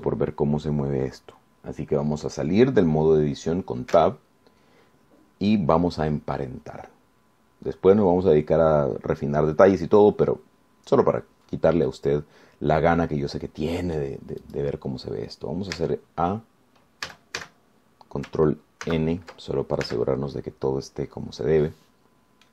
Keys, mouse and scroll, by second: 5.2 Tab, 7.0 scroll down 2, 7.6-11.2 drag, 11.4-11.8 scroll up 2, 12.0-12.4 scroll down 2, 13.1-15.4 drag, 15.6 click, 17.0 Tab, 18.3 a, 20.0 ctrl+n, 21.0 Tab, 22.2-22.5 scroll down 2.